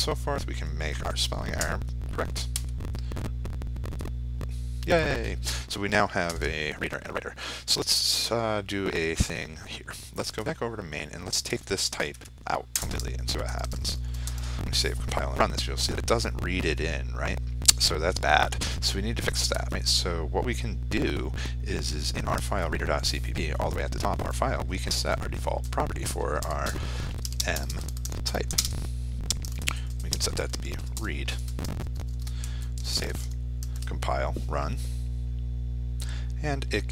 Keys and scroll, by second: 16.5 ctrl+s, 17.5 ctrl+r, 35.0 ctrl+space.